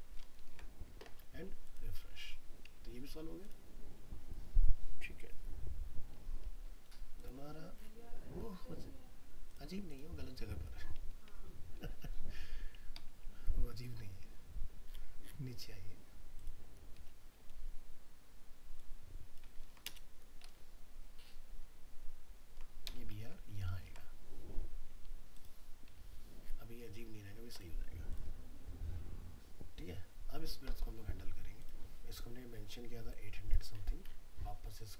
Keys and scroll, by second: 0.2 ctrl+s, 11.5 ctrl+Right, 19.6 ctrl+x, 20.7 ctrl+Right, 23.1 ctrl+v, 23.7 ctrl+s.